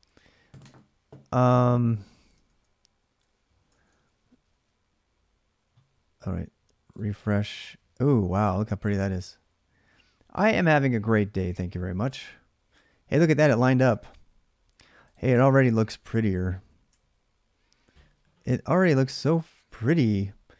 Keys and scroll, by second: 2.1 alt+Tab, 3.4 alt+Tab, 14.9-17.4 typing.